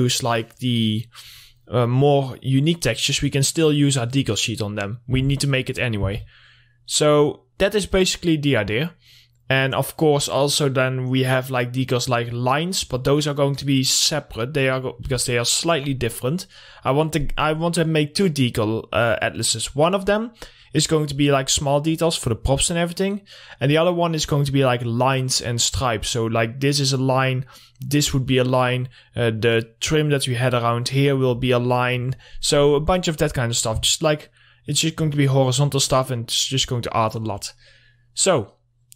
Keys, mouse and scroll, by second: 3.3 click, 3.4 click, 5.5 Right, 9.2 scroll up 1, 9.5 click, 10.2 scroll down 1, 11.5 scroll up 1, 18.3-19.6 drag, 19.6 scroll down 1, 23.9 scroll up 1, 26.4-26.8 scroll up 1, 28.7 click, 29.2-31.0 scroll up 1, 31.2 click, 31.6 scroll down 1, 38.5-38.9 drag.